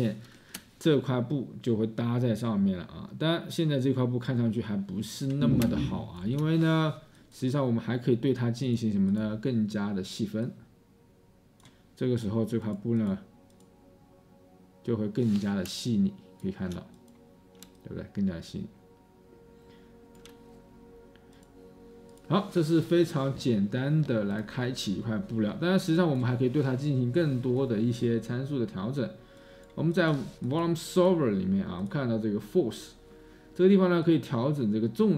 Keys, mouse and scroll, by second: 4.3-5.5 space, 5.7-6.5 space, 16.4-16.9 space, 17.7 space.